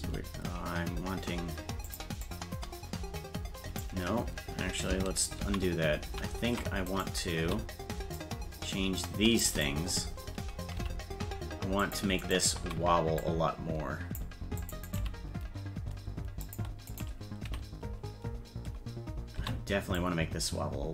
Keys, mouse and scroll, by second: 0.0 g, 2.3-3.8 drag, 5.5 ctrl+z, 6.9 right click, 7.4 c, 10.8 g, 12.2 right click, 12.6 c, 15.0 g, 16.9 right click, 17.4 v, 19.4 c.